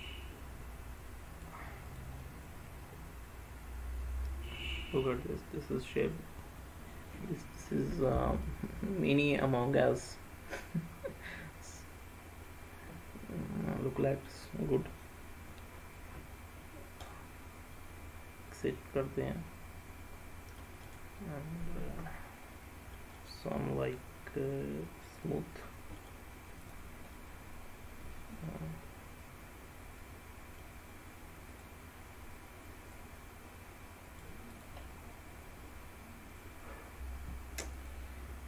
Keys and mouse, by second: 2.0 click, 2.3-5.8 middle drag, 5.9 middle click, 8.6 middle click, 10.2-14.4 middle drag, 17.1 click, 17.9-20.7 middle drag, 20.9-21.6 right drag, 22.6 middle click, 23.4 right drag, 25.2 click, 26.2-26.8 right drag, 27.2-30.7 middle drag, 33.0-34.2 drag, 34.6 click, 35.0-37.0 middle drag, 37.8-38.4 drag.